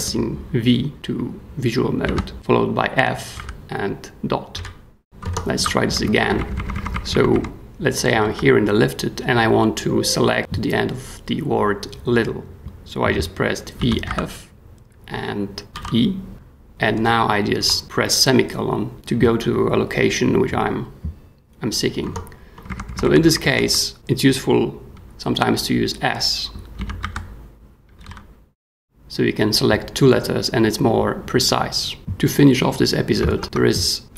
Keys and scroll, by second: 2.0 v, 3.3 f, 4.5-6.9 typing, 5.2 Escape, 8.2 w, 13.8 v, 14.0 f, 15.7 ;, 16.3 e, 16.9 ;, 17.6 ;, 22.0 Escape, 22.7 b, 23.2 b, 26.7-28.5 typing, 33.3 super+Tab.